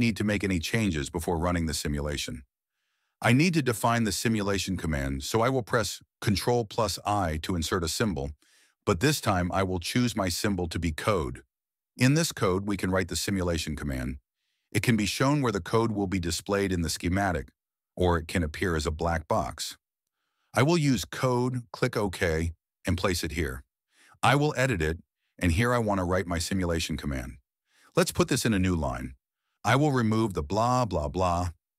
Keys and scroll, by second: 6.9 ctrl+i, 11.1 c, 13.0-14.1 typing, 23.2 m, 26.5 q, 27.7 BackSpace, 29.0 typing, 29.6 Left, 29.9 Return, 30.1 Return, 30.5 Up.